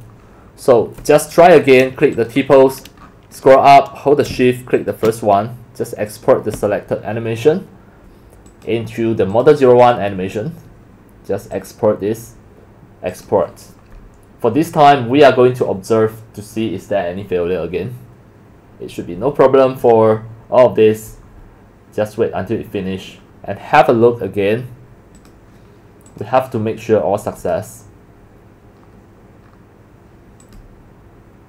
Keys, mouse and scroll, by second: 4.7 shift+click, 8.4 click, 9.3 click, 11.5 click, 13.1 click, 21.8 click, 26.1 click, 27.4-28.3 drag, 30.4 click.